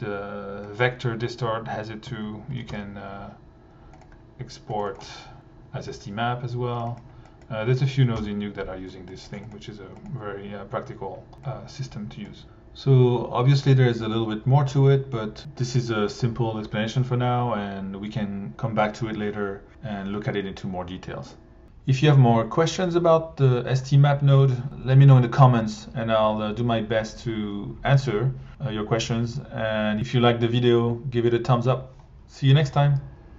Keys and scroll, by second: 2.1 Tab, 2.3-3.2 typing, 8.2 Delete, 8.9 alt+Delete.